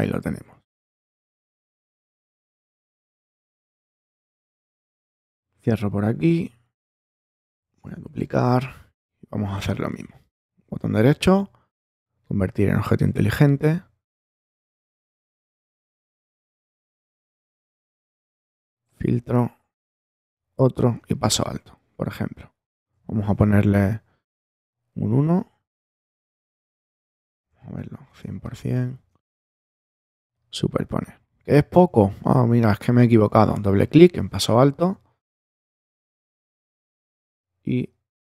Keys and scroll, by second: 7.8 super+j, 23.5 i, 27.7 super+-, 28.2 super+space, 29.1 space.